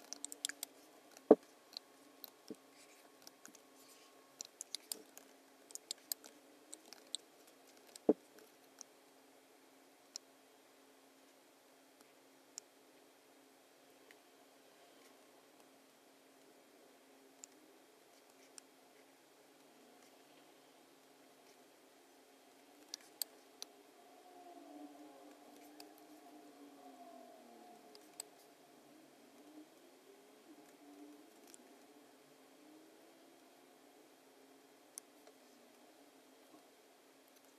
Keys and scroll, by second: 0.0-3.2 typing, 0.2 super+=, 4.3 BackSpace, 4.7 space, 5.8 space, 7.1 super+=, 7.7 v, 22.9 space, 25.5 space, 27.9 space, 31.4 a.